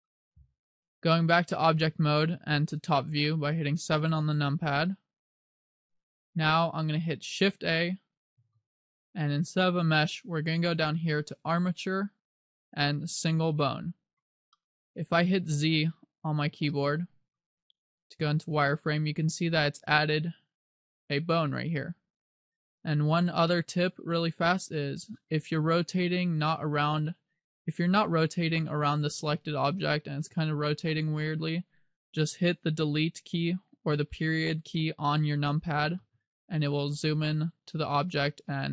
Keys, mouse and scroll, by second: 1.7 Tab, 3.1 KP_7, 4.9 shift+middle click, 6.9-8.5 scroll up 2, 8.5 shift+a, 14.7 middle click, 16.8 shift+middle click, 17.7 z, 18.1-18.7 scroll up 3, 18.9 middle click, 22.7-23.6 scroll down 2, 23.6 middle click, 25.3 middle click, 36.1 KP_Decimal, 37.4-38.0 scroll down 6, 38.4 middle click.